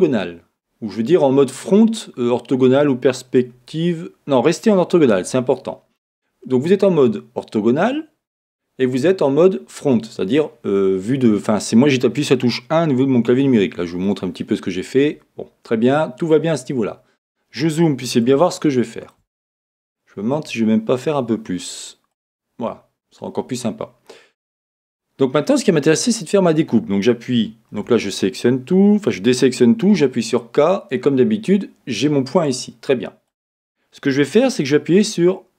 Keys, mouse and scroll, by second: 16.5-17.0 scroll, 22.1 click, 27.7 a, 29.9 k.